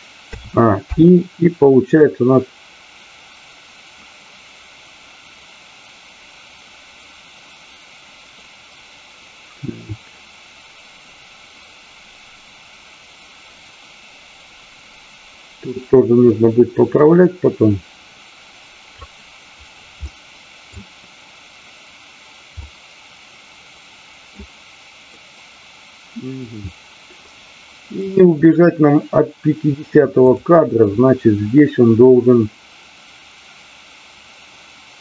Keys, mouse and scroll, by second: 2.0-19.0 drag, 20.0-20.7 middle drag, 22.5-24.4 middle drag, 25.1-26.4 middle drag, 27.4 middle click, 30.3 click.